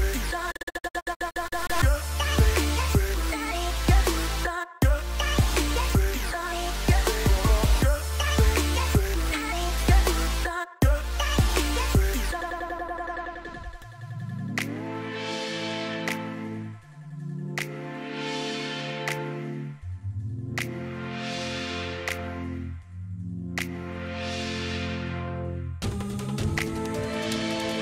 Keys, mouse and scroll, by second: 22.6 right click.